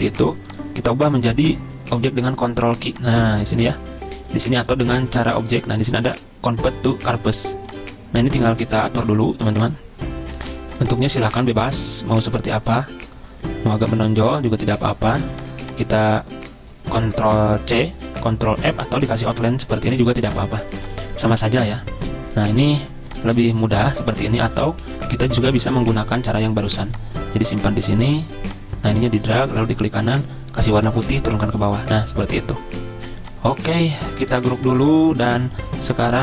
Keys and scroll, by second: 2.1 ctrl+q, 11.3 ctrl+z, 24.5 ctrl+z, 24.8 ctrl+z, 31.5 ctrl+Page_Down, 31.6 ctrl+Page_Down, 34.5 ctrl+g, 35.1 ctrl+z.